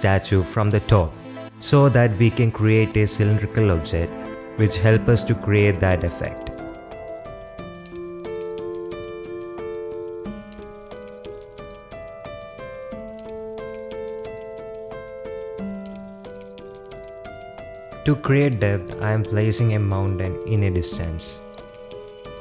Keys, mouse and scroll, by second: 0.0-0.6 typing, 2.3 middle click, 2.6 Tab, 2.9 Tab, 3.2 a, 3.4 ctrl+e, 5.0-6.1 drag, 6.4 middle click, 6.6 Tab, 6.9 click, 7.2-7.6 middle drag, 7.8-8.1 middle drag, 8.4 Tab, 8.9 ctrl+e, 9.8 click, 10.1 Tab, 10.2 drag, 10.4-10.9 middle drag, 11.1 middle click, 11.3 shift+middle drag, 11.5-12.2 middle drag, 13.2 click, 13.9 middle click, 14.1 shift+middle click, 14.4 click, 14.6 middle drag, 16.4 KP_7, 17.1 s, 18.1 g, 18.4 shift+click, 18.7 r, 21.5 z.